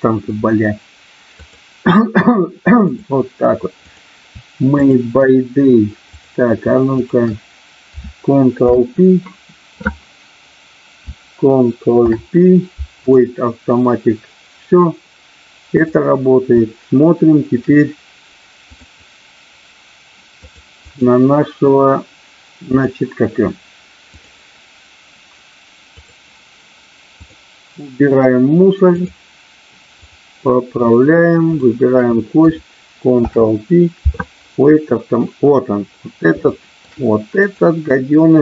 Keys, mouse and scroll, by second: 1.4-2.9 drag, 3.8 click, 4.8 shift+click, 8.7 ctrl+p, 11.9 ctrl+p, 15.7 click, 18.8-20.6 drag, 20.8-22.9 drag, 24.1-26.1 drag, 27.3-29.1 drag, 29.9 click, 31.4 shift+click, 33.2 ctrl+p, 36.4 shift+middle click, 37.4 click.